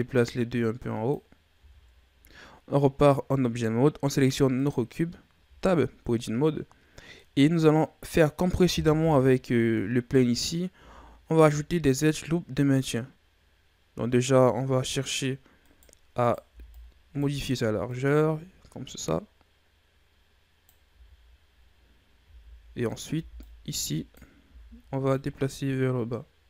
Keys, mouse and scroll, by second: 1.5 Tab, 4.5 right click, 5.4 Tab, 7.0 scroll down 1, 7.1-8.9 middle drag, 8.9 KP_3, 10.3 scroll up 1, 10.7 z, 11.4-14.4 drag, 15.5 right click, 16.1 right click, 16.4 b, 17.8-20.8 drag, 20.8 z, 22.1 z, 22.8 right click, 23.1 b, 24.4 z, 25.0-26.4 drag.